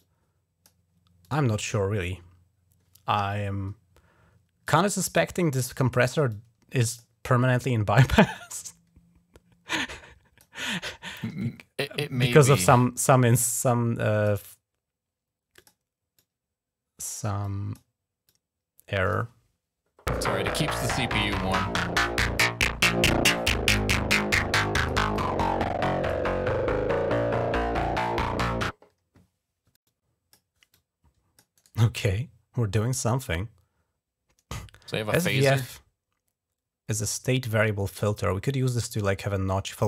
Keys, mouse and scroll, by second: 1.0 click, 1.3 click, 4.4 click, 5.1 click, 5.7 right click, 6.1 click, 6.8 right click, 7.8-10.4 drag, 10.5 click, 11.8 click, 12.5 right click, 13.3 click, 14.1 right click, 15.3 click, 15.9 click, 17.2 click, 18.0 click, 19.0 click, 22.2-23.6 drag, 23.6 right click, 23.7 click, 24.7 right click, 24.9-25.9 drag, 25.9 right click, 29.6 click, 30.6 click.